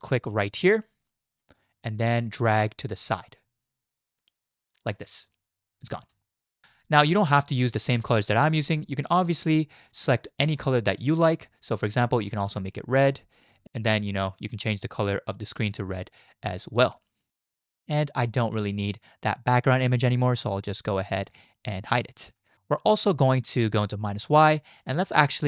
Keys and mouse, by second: 1.5-5.0 drag, 6.2 shift+drag, 6.6 ctrl+z, 6.6-8.1 drag, 11.8 click, 13.9 drag, 14.1 middle click, 14.5 shift+drag, 16.3-16.6 drag, 16.6-17.3 middle drag, 17.6 shift+click, 18.5 middle click, 21.2 click, 23.2 click, 25.1 shift+click.